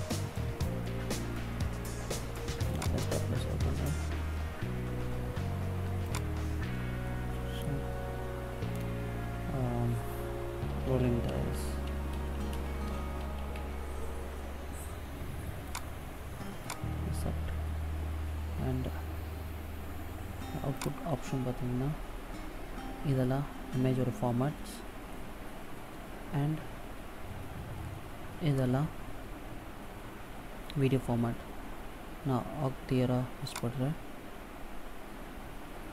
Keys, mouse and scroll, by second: 16.5 click, 20.5 click.